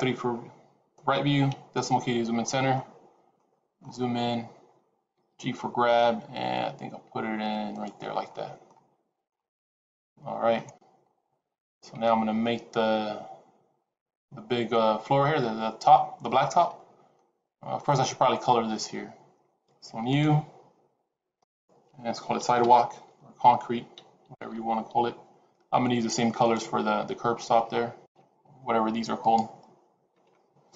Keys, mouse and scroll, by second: 1.4 KP_Decimal, 2.3-3.2 scroll up 11, 3.2 shift+middle click, 3.9-4.4 scroll up 1, 5.1 g, 8.0 scroll down 3, 8.2 middle click, 8.8-9.2 scroll down 4, 9.2 middle click, 11.4-11.8 scroll down 1, 17.1 middle click, 20.0 click, 21.3 click.